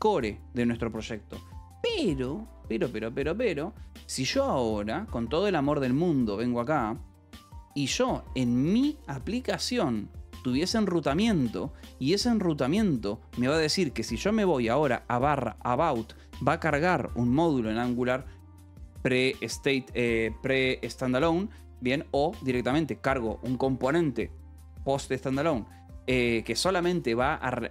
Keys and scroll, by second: 1.8 alt+p, 1.8 w, 5.5 :, 6.9 j, 7.9 k, 8.1 Return, 8.4 j, 9.3 j, 9.6 k, 11.2 Return, 14.9 Return.